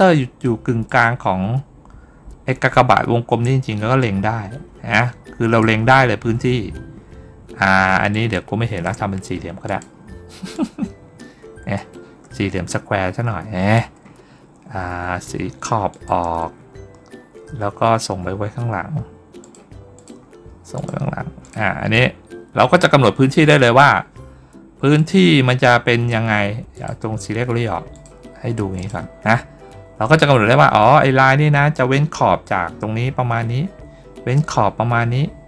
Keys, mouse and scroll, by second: 3.9 click, 8.0-8.7 drag, 9.5 click, 10.4-13.6 drag, 15.8 shift+click, 19.3 click, 19.8 click, 20.6 click, 21.3 click, 21.8-23.6 drag, 24.8 click, 26.6 click, 27.8 click, 28.6 click.